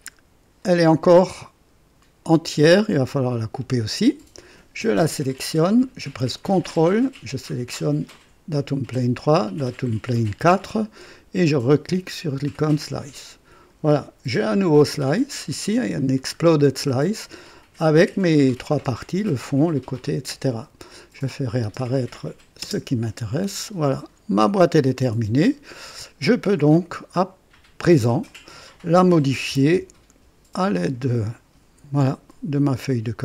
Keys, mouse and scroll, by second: 2.2-3.5 drag, 4.8 click, 8.1 ctrl+click, 9.5 ctrl+click, 11.8 click, 13.0-13.9 drag, 15.5 click, 16.0 scroll down 1, 18.3 click, 18.7 space, 19.4 space, 21.1 click, 21.6 space, 21.6 space, 22.1 click, 22.6 space, 23.6 click, 24.3-24.6 scroll down 2, 24.9 click, 26.7 click, 28.2 click, 29.3 KP_3, 29.4 KP_0, 29.7 KP_Enter, 31.0 click, 31.1 typing, 32.5 click.